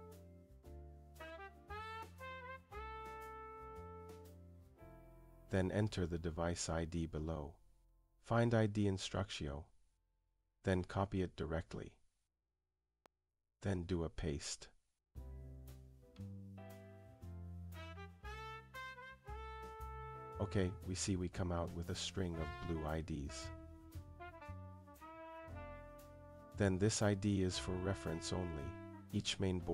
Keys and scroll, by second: 3.8 Return.